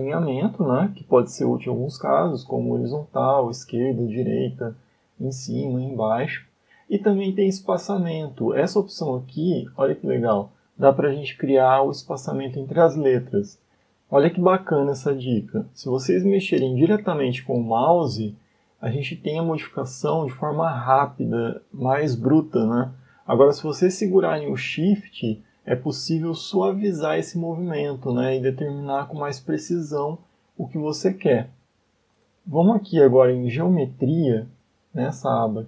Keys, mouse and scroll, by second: 9.5 click, 15.4 click, 20.5 shift+click, 33.7-34.7 scroll up 6.